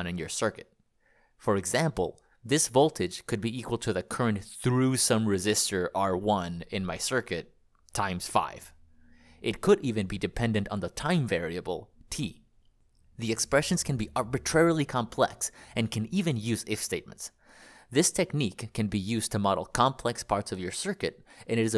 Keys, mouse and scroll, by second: 1.5-7.6 typing, 9.8-10.2 BackSpace, 10.9 Escape, 12.3 click, 12.5 click, 14.7 click.